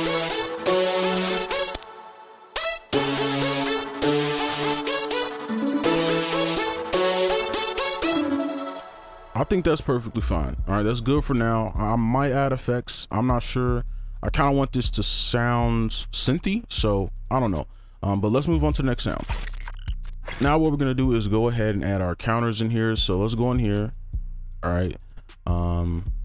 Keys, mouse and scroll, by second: 1.9 space, 8.8 space, 11.1 right click, 11.5-11.9 scroll up 1, 11.9-13.5 scroll down 1, 13.5-13.8 scroll up 1, 13.8-14.7 scroll down 1, 14.8 right click, 23.2 right click.